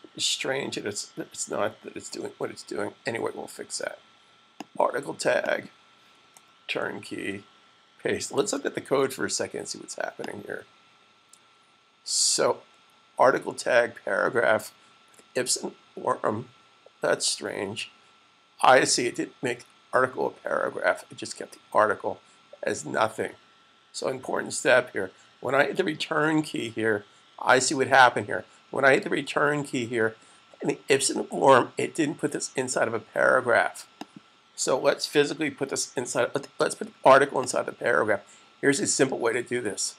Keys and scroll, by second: 7.0 v, 8.0 super+s.